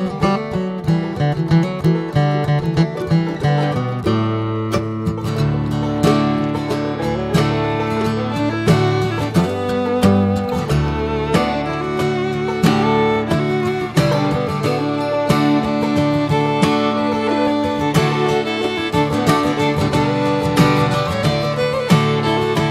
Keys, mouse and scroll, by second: 0.4-0.7 scroll up 2, 0.7-1.1 shift+middle drag, 1.1 s, 2.4-3.1 shift+middle drag, 3.1 r, 5.2 click, 6.5-9.3 shift+middle drag, 9.3 Tab, 9.9 click, 12.0 click, 14.9 click, 15.4 click, 16.2 click, 17.8 click, 18.4-19.5 shift+middle drag, 19.5 click, 20.6 click, 22.3 r.